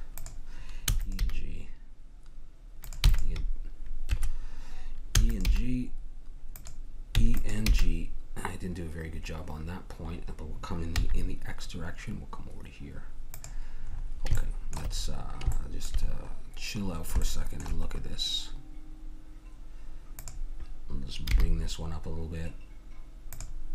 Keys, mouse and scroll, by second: 0.2-2.3 drag, 0.8 e, 1.2 g, 3.0 w, 5.2 e, 5.5 g, 7.2 e, 7.7 g, 15.0 middle click, 16.1-17.5 middle drag, 20.2-22.2 drag, 21.3 g.